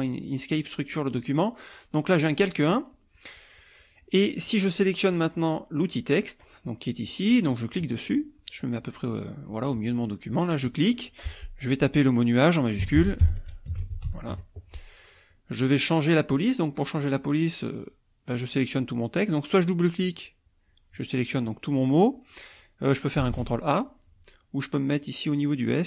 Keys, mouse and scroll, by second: 7.8 click, 10.7 click, 12.7-14.5 typing, 19.8 click, 22.3 click, 23.2 ctrl+a, 25.0 click.